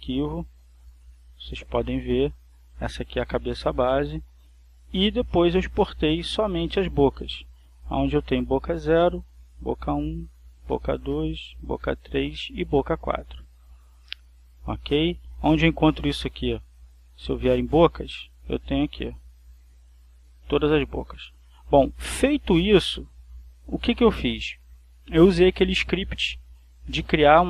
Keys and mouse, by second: 2.0-3.0 drag, 4.0 click, 5.0 click, 6.0 click, 6.7 click, 7.6 click, 8.8-9.8 drag, 9.9-11.0 drag, 11.3-12.4 drag, 12.5 click, 13.6 click, 14.8 click, 15.5 click, 17.1 click, 18.8 click, 19.5-20.7 drag, 21.3 click.